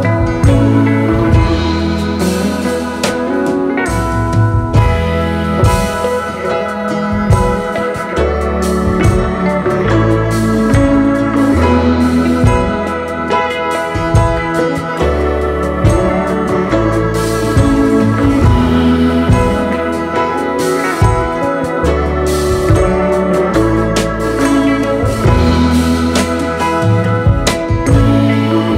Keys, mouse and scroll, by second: 2.9 space, 4.1 typing, 5.9 typing, 9.0 double click, 14.5 double click, 17.3 double click, 18.7 ctrl+a, 18.9 scroll up 2, 19.8-20.4 scroll up 9, 22.6 double click, 23.1 space.